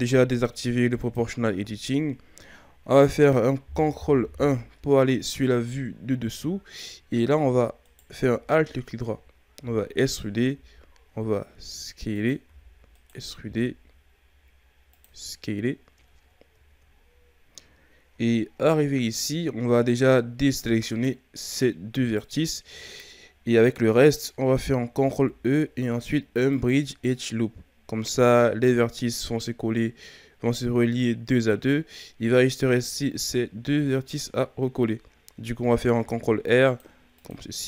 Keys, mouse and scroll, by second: 1.0 click, 4.2 ctrl+KP_7, 5.5-6.1 ctrl+scroll up 1, 6.1-6.8 shift+scroll up 3, 6.8-7.8 scroll up 1, 7.8 alt+right click, 8.6-9.6 shift+scroll up 2, 9.6 e, 10.5 s, 12.4 e, 13.4 s, 15.4-16.0 scroll up 4, 16.0-16.6 ctrl+scroll down 5, 16.6-17.3 shift+scroll up 3, 18.3-18.8 shift+scroll up 1, 18.8-20.9 scroll up 1, 20.9 shift+right click, 22.1 shift+right click, 25.0 ctrl+e, 32.3-35.4 scroll down 1, 36.0 ctrl+r.